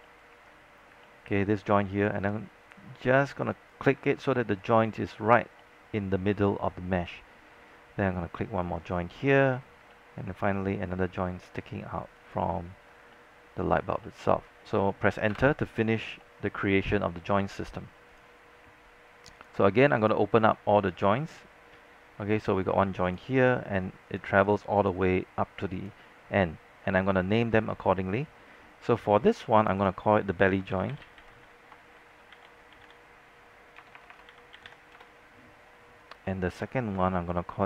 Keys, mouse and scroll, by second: 0.1 alt+middle click, 0.9 scroll down 1, 1.1-2.3 alt+middle drag, 3.6 click, 4.1 alt+middle click, 5.2-5.6 scroll up 1, 5.8 alt+middle click, 8.9 click, 9.4 scroll down 1, 10.0 alt+middle click, 12.4 click, 13.0 scroll down 1, 13.5 alt+middle click, 13.7 scroll up 1, 14.5 alt+middle click, 15.5 Return, 16.1 scroll down 1, 16.4 alt+middle click, 18.3 click, 21.9 alt+middle click, 22.5 click, 29.7 click, 30.8-32.9 typing, 34.0-35.4 typing, 36.6-37.6 drag.